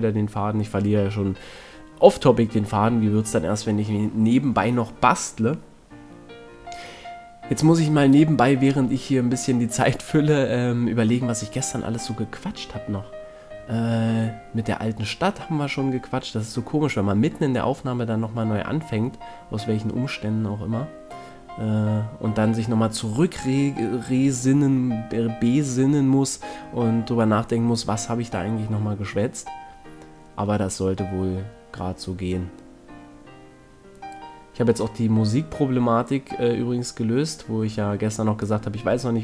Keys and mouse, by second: 3.4 a, 4.2 middle click, 5.9 middle click, 6.4 middle click, 6.7 middle click, 11.6-14.1 middle drag, 14.2 middle click, 14.6 middle click, 15.1 middle click, 15.4 middle click, 17.2 middle click, 17.8 right click, 18.2 right click, 18.7 middle click, 18.8 middle click, 19.2-20.6 middle drag, 23.2 middle click, 23.6 middle click, 25.2 KP_1, 27.6 right click, 29.9 ctrl+Tab, 33.8 right click, 34.6 right click, 35.6-36.6 middle drag, 38.3 ctrl+Tab.